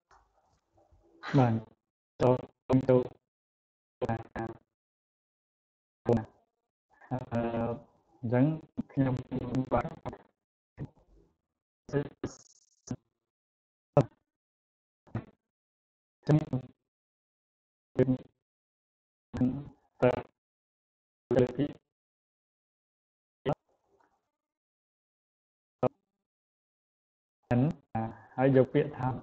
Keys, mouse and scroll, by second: 0.0 click.